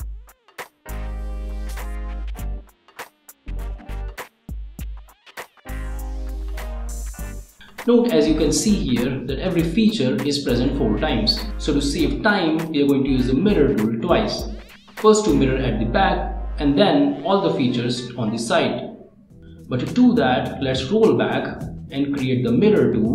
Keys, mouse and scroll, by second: 0.6 click, 1.5 click, 2.0 right click, 3.2-7.2 drag, 8.7 click, 10.4 click, 11.2 click, 11.6 click, 12.4 middle click, 12.9 click, 14.3 click, 15.0 click, 15.5 click, 16.0 click, 16.5 1, 17.4 click, 17.8 scroll up 1, 18.1 middle click, 19.2 click, 19.3 middle click, 20.2 click, 21.4 click, 22.0 click.